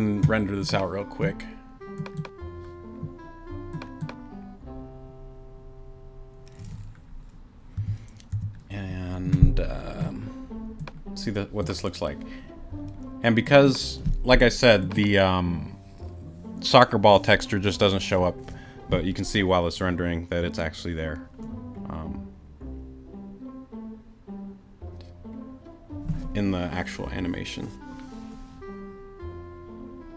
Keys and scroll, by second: 7.8 9, 8.3 6.